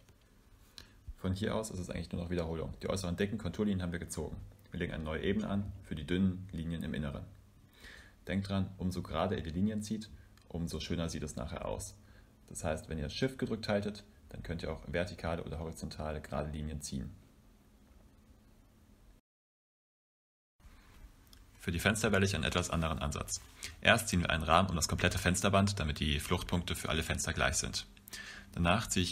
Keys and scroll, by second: 2.1 Return, 2.1 shift+3, 5.3-6.5 typing, 8.3 Return, 11.3 Return, 14.7 Return, 18.3 Return, 19.7 Return, 25.7 Return, 27.9 Return.